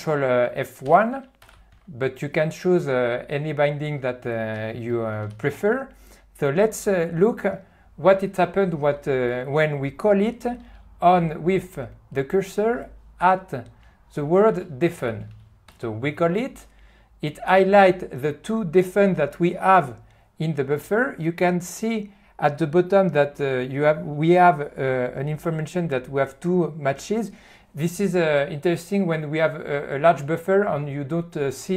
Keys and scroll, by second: 0.9 alt+q, 1.7 n, 1.8 n, 5.4 q, 15.7 ctrl+F1.